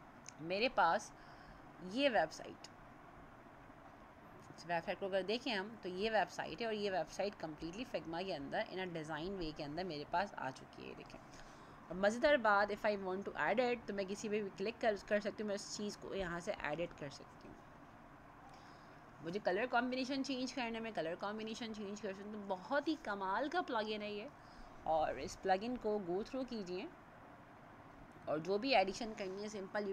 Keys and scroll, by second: 10.1 ctrl+0, 16.7 ctrl+a, 25.4 ctrl+0.